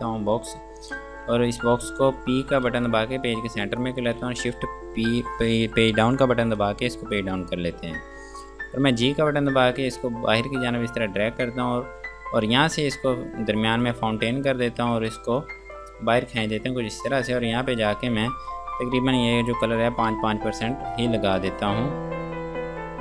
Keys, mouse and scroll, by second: 1.3 space, 2.9 p, 3.7 F2, 4.0 click, 6.8 shift+Page_Down, 9.1 g, 9.6 click, 13.0 click, 20.3 KP_5, 20.5 Tab, 20.9 KP_5, 21.2 Tab.